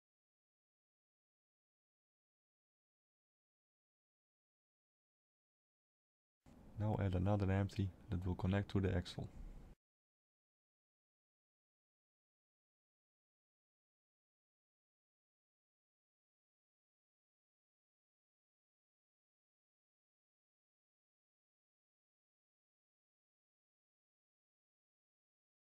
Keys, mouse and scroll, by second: 0.5 click, 2.9 shift+middle click, 3.5 middle click, 3.5 scroll down 1, 5.0 shift+a, 11.3 click, 14.3 click, 19.5 shift+middle click, 21.1 click, 24.1 click, 25.4 click.